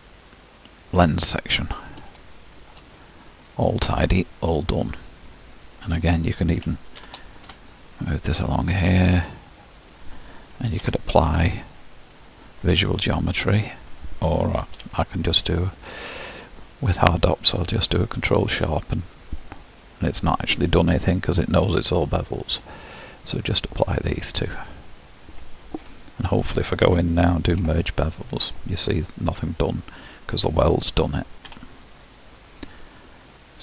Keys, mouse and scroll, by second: 1.4-2.2 scroll up 5, 2.2 shift+middle click, 3.0-5.4 scroll up 2, 5.4-7.3 scroll down 9, 7.3 shift+d, 9.3 click, 9.6-11.0 scroll up 6, 17.7 q, 23.3-26.1 drag, 26.1 Tab, 26.8 a, 31.7 Tab, 32.3-33.3 scroll up 4, 33.3-33.6 middle drag.